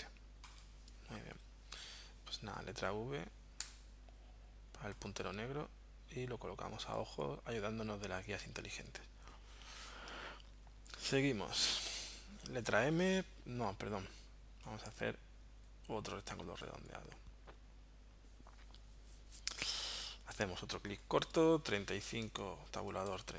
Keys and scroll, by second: 2.0 v, 3.6 v, 12.9 m, 21.5-23.3 typing.